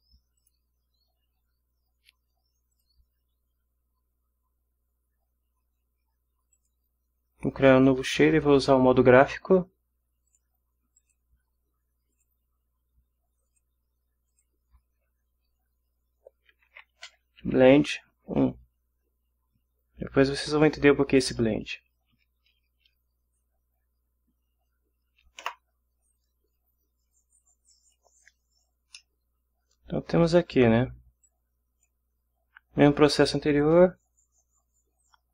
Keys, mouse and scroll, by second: 0.4 click, 2.7 click, 6.5 click, 10.3 click, 11.0 click, 12.1 click, 13.5 click, 14.3 click, 16.5-18.3 typing, 25.4 Return, 27.2-28.1 drag, 28.9 ctrl+scroll down 2, 29.0-30.4 ctrl+middle drag, 31.2-32.0 drag, 33.5 click.